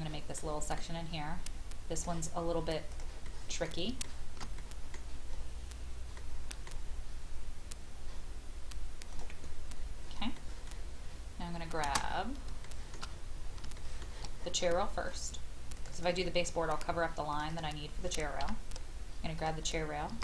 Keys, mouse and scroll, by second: 0.4 middle click, 1.9 click, 3.2 middle click, 4.0 shift+middle click, 5.3-5.8 scroll up 1, 6.1-7.2 middle drag, 8.0-9.1 scroll up 1, 9.1 click, 10.4 middle click, 10.7 scroll down 1, 12.6 shift+middle click, 13.0 scroll down 1, 13.7 shift+middle click, 14.4-15.7 scroll up 1, 15.7 click, 16.7-17.3 scroll up 1, 17.3 click, 18.4 m, 19.4 click.